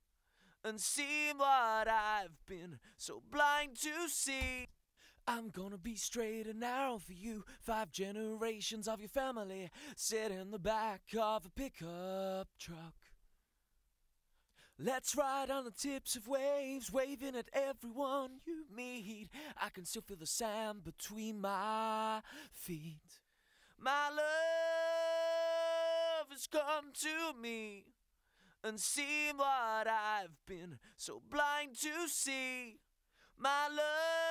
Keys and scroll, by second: 4.4 space.